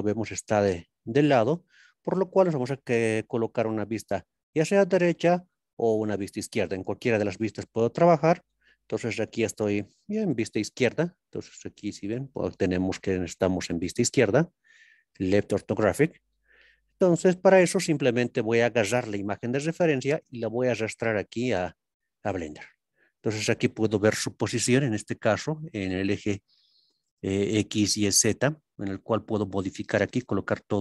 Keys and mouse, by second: 3.9 KP_3, 5.0 ctrl+KP_3, 23.2 n.